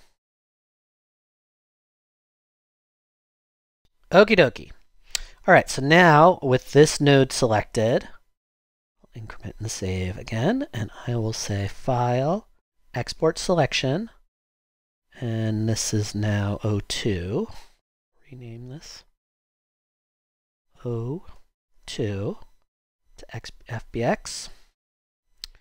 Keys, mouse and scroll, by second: 3.8 BackSpace, 20.3 Right, 21.6-22.7 typing.